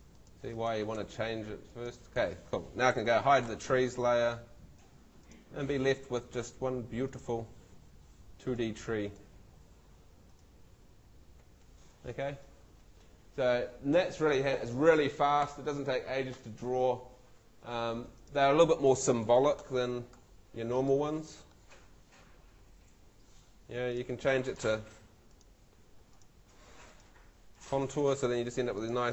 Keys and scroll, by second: 3.1 super+l, 9.5 Escape, 11.4 ↺.